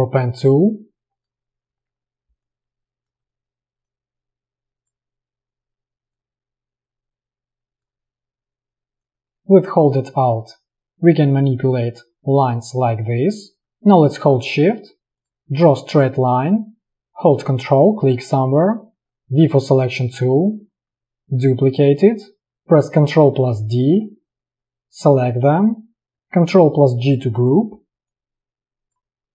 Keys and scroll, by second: 19.0 v, 23.4 ctrl+d, 27.1 ctrl+g.